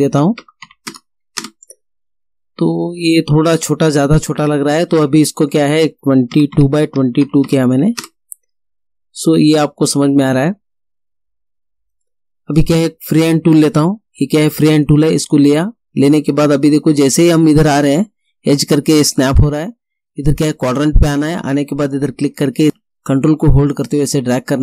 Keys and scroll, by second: 0.0-0.7 typing, 0.5 Tab, 1.4 Return, 6.4 2, 7.0 Tab, 7.3 2, 8.1 Return.